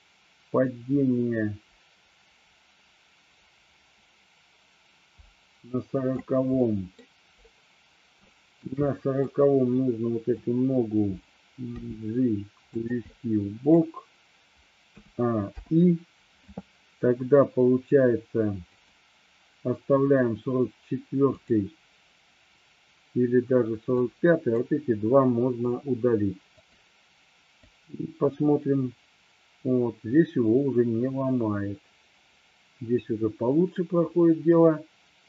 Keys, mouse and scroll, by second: 6.7-7.0 middle drag, 8.3-8.7 shift+middle drag, 9.0 middle drag, 10.0-10.5 drag, 11.8 g, 12.8 click, 13.2 scroll up 1, 13.3-13.8 middle drag, 13.8 scroll down 1, 15.0 a, 15.5 i, 18.8 click, 21.4 click, 23.9-24.7 drag, 25.7 Delete, 26.7 click, 27.7-35.2 drag.